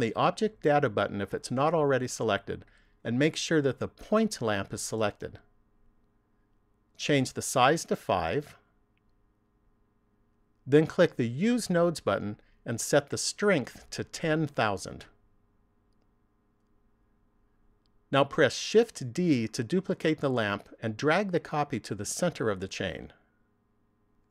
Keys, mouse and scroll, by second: 2.3 click, 8.0 click, 11.8 click, 13.7 click, 16.0 KP_0, 16.5 KP_0, 19.7 shift+d, 23.5 click.